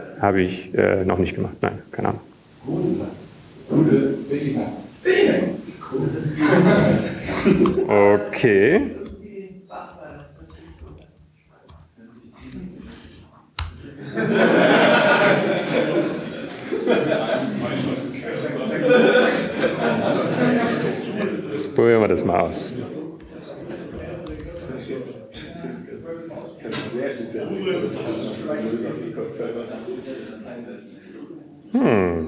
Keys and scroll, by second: 11.7 ctrl+g, 11.7 ctrl+h, 13.1 alt+x, 13.1 typing, 14.1 ctrl+g, 14.1 alt+x, 15.1-17.8 typing, 28.1-28.8 typing, 29.4 Tab, 30.4 Right, 31.5 Right.